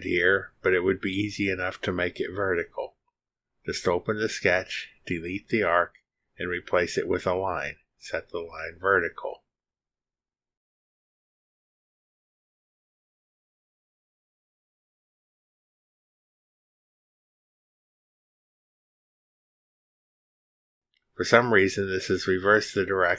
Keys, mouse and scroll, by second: 4.3 click, 5.0 scroll up 1, 5.5 click, 6.5 click, 7.2 Delete, 8.3 click, 9.9 click, 11.2 click, 11.5 click, 12.2 click, 14.5 click, 15.5 click, 16.7 middle click, 16.8-19.7 drag, 20.1 middle click, 20.2-21.5 drag, 22.9 click.